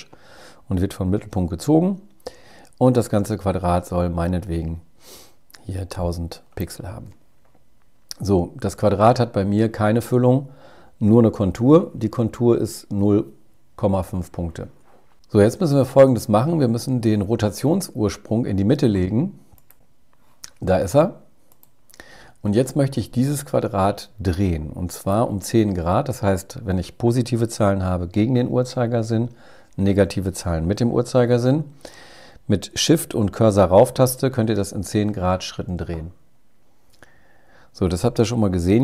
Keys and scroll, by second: 34.3 shift+Up, 38.0 super+z.